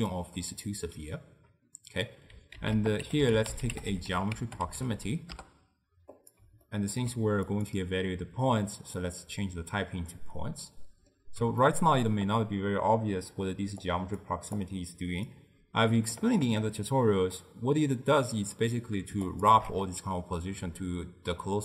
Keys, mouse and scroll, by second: 0.3 click, 0.8 d, 2.6 ctrl+a, 6.7-7.5 ctrl+middle drag, 7.5-10.3 drag, 10.3-13.9 middle drag, 13.9 click, 14.6 click, 19.4 alt+shift+click.